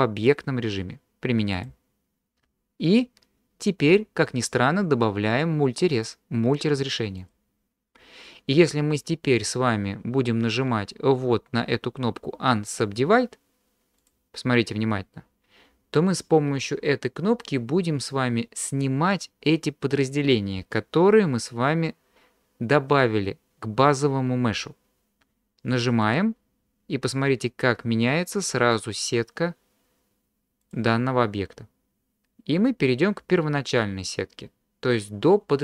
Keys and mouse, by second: 0.2-1.7 drag, 6.0-7.3 drag, 14.0 click, 26.1 click, 28.7 click.